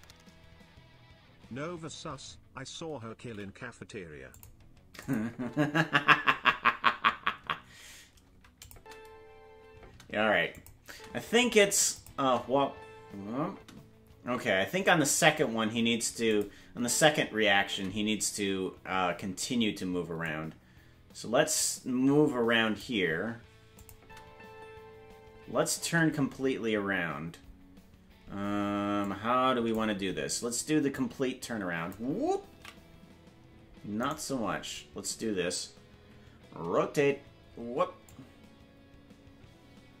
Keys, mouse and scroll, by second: 5.0 click, 5.0 g, 5.3 space, 8.6 click, 8.6 space, 8.7 space, 10.0 space, 10.5 click, 10.8 space, 11.8 space, 11.9 click, 12.1 space, 15.5 space, 16.3 click, 16.7 space, 18.5 space, 20.2-22.8 drag, 23.8 click, 23.9 space, 29.0 click, 29.0 space, 30.9-31.9 drag, 33.0 ctrl+z, 34.1 right click, 36.6 alt+r, 38.0-40.0 drag.